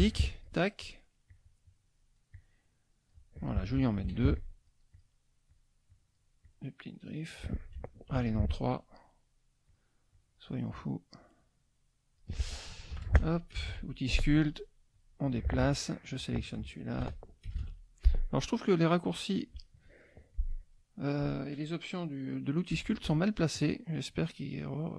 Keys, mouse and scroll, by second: 0.2 ctrl+click, 0.8 ctrl+click, 1.3-3.3 ctrl+drag, 4.0 ctrl+d, 4.3 ctrl+click, 4.9 click, 5.4 click, 5.8 click, 6.4 click, 8.1 ctrl+d, 8.4 ctrl+click, 9.0 ctrl+click, 9.7 click, 10.1 click, 10.7-12.3 drag, 12.9 shift+F2, 13.7 shift+p, 14.4 click, 14.9 click, 15.6 F1, 15.7 click, 17.0 shift+F2, 17.6 shift+p, 18.2 click, 18.9 click, 19.5 click, 20.3 click, 22.7 F1, 23.0 middle click, 23.5 click, 24.2-24.9 drag.